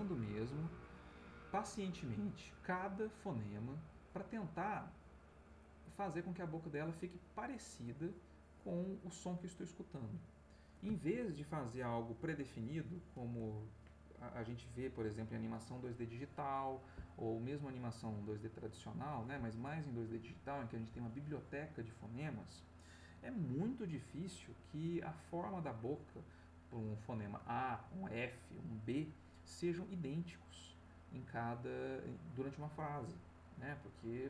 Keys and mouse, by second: 8.9 middle click.